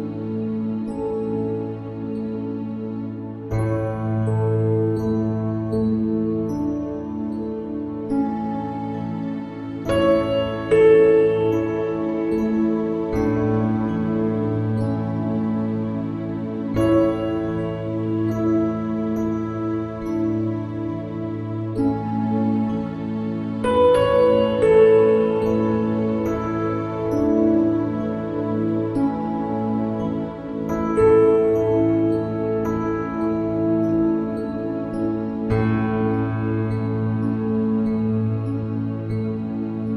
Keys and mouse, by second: 31.1 click.